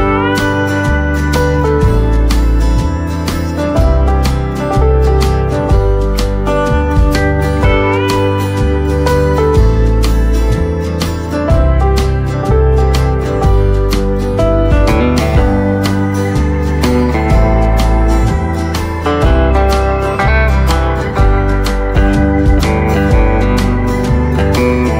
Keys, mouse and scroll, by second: 0.3-5.3 right drag, 5.3 click, 12.8 shift+right click, 14.5 click, 16.7-17.5 scroll up 1, 18.0 click, 19.3 shift+click, 23.9-24.9 right drag.